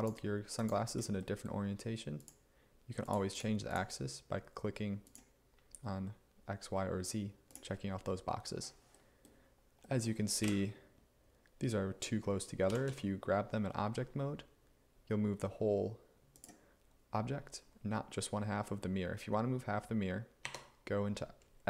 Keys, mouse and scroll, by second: 10.5 1, 12.7 g, 12.9 x, 20.5 Tab.